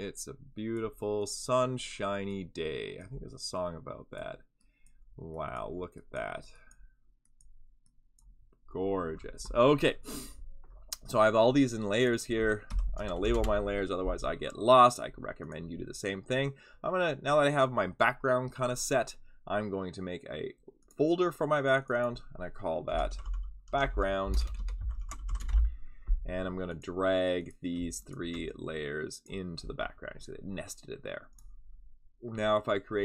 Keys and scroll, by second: 12.4-13.6 typing, 22.6-25.7 typing.